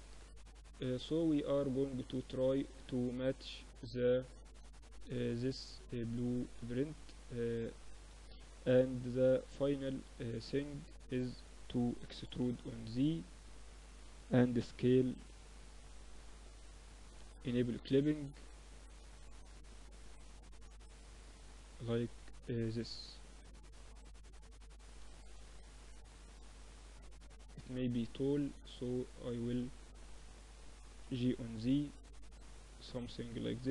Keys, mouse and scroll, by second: 0.7-2.5 middle drag, 6.6-9.2 drag, 10.0-11.9 drag, 11.2 e, 12.7-14.7 middle drag, 13.6 s, 16.3-19.0 drag, 19.6 middle click, 19.9 Tab, 20.4 Tab, 21.0 click, 21.6-25.2 middle drag, 23.6 Tab, 24.2 click, 25.2 Tab, 26.2 a, 26.6-30.6 drag, 27.2-28.3 right drag, 28.3 a, 28.8 right click, 30.0 g, 32.5-33.7 middle drag, 32.8 z.